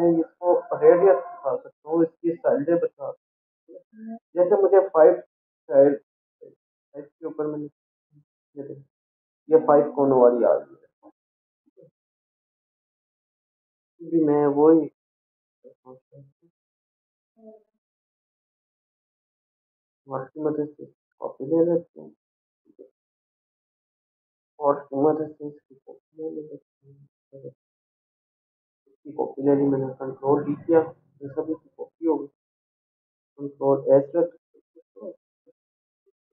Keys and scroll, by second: 7.3 5, 25.0 ctrl+z, 31.0 ctrl+d, 34.6 ctrl+a, 35.5 Up.